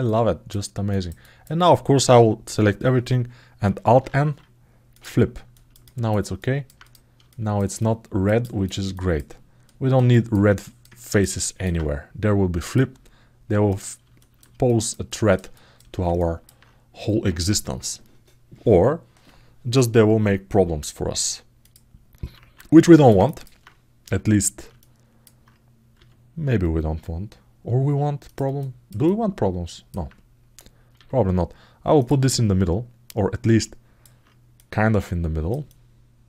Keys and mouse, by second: 0.6 ctrl+alt+middle click, 1.0 alt+middle click, 5.3 ctrl+alt+middle click, 6.1 alt+middle click, 6.6 click, 7.0 alt+shift+middle click, 7.5 alt+middle click, 8.2 ctrl+alt+middle click, 8.7 alt+shift+middle click, 9.4 alt+middle click, 9.9 alt+shift+middle click, 10.4 alt+middle click, 10.7 ctrl+alt+middle click, 11.2 alt+shift+middle click, 12.4-13.8 middle drag, 13.8 alt+shift+click, 14.0 alt+shift+middle click, 14.0 alt+shift+right click, 14.4 alt+middle click, 14.8 ctrl+alt+middle click, 15.3 alt+shift+middle click, 15.9 ctrl+alt+middle click, 21.4 click, 22.2 alt+q, 22.6 alt+shift+middle click, 23.0 ctrl+alt+middle click, 23.8 a, 24.5 alt+middle click, 28.3 alt+middle click, 28.8 alt+shift+middle click, 32.0-33.4 alt+middle drag, 33.6 alt+middle click, 34.3 middle click.